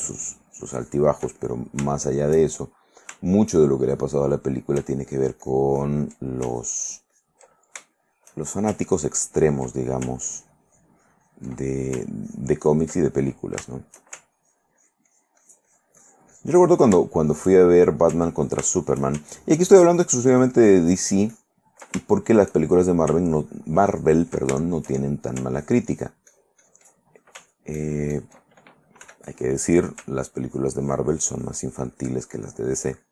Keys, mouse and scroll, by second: 0.1-1.3 ctrl+drag, 1.6 ctrl+middle click, 2.2 ctrl+shift+middle click, 2.8 shift+middle click, 4.1 shift+middle click, 5.2 ctrl+click, 5.7 ctrl+click, 6.7 ctrl+click, 7.7 ctrl+shift+middle click, 8.9-9.9 ctrl+shift+drag, 9.9 ctrl+middle click, 10.4-11.7 ctrl+drag, 11.7 ctrl+middle click, 12.4 ctrl+click, 12.9 ctrl+middle click, 13.3 ctrl+middle click, 13.8 ctrl+shift+middle click, 14.5-17.1 ctrl+shift+drag, 17.3 ctrl+shift+middle click, 17.8 shift+middle click, 18.8 ctrl+shift+middle click, 19.6 ctrl+shift+click, 20.3 ctrl+click, 22.3 ctrl+shift+middle click, 23.5 ctrl+click, 24.7 ctrl+shift+middle click, 25.7-27.1 ctrl+shift+drag, 27.5 ctrl+click, 28.2 ctrl+click, 29.2 f, 29.9 click, 30.6-33.1 ctrl+drag.